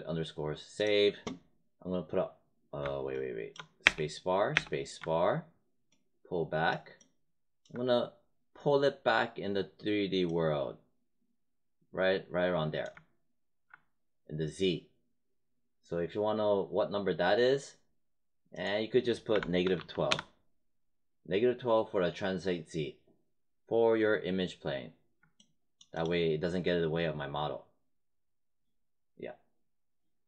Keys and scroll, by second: 3.8 space, 19.0-20.2 typing.